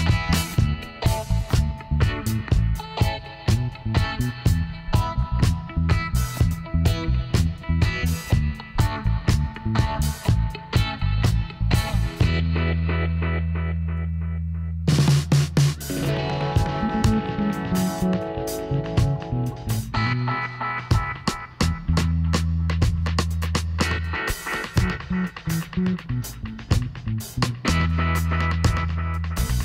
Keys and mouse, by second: 1.2-2.3 drag, 2.3 middle click, 2.9 click, 3.1 right click, 4.6-6.7 middle drag, 6.7-8.7 drag, 8.9-12.5 middle drag, 12.5-14.3 drag, 15.2-16.2 middle drag, 15.4 KP_1, 17.7 middle click, 18.4-22.9 middle drag, 22.9-24.6 drag, 28.1-29.6 drag.